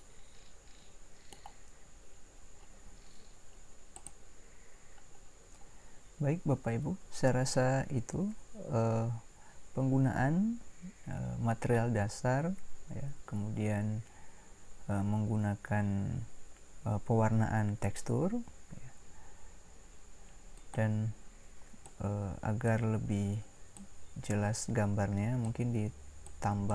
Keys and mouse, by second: 0.1 middle click, 4.0-20.5 drag, 25.1-26.5 drag.